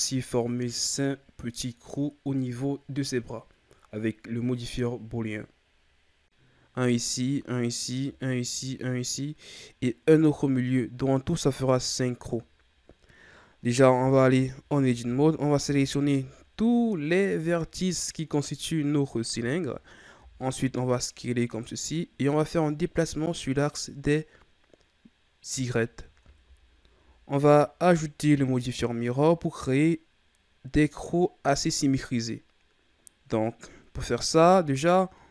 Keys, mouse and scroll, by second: 1.0-3.3 drag, 3.3 s, 6.4-10.2 drag, 14.0 Tab, 14.9 a, 15.6 a, 18.2-19.6 scroll up 1, 19.6-20.1 ctrl+scroll down 2, 20.1 s, 22.4-25.5 drag, 25.7-28.1 shift+scroll down 4, 32.8-33.1 scroll down 4.